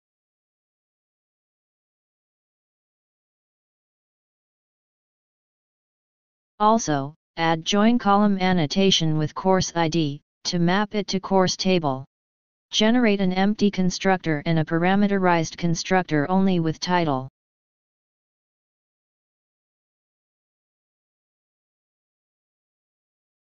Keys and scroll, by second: 4.1 ctrl+shift+o, 12.3 ctrl+shift+o, 17.6 ctrl+d, 18.8 alt+Down, 19.1 alt+Down, 20.3 ctrl+z, 21.3 alt+Down, 23.3 ctrl+d.